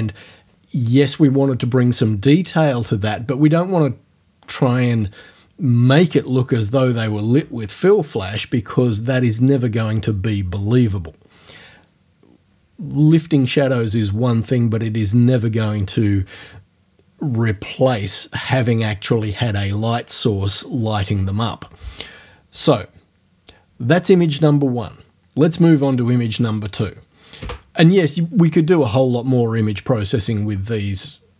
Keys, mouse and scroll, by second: 27.4 space.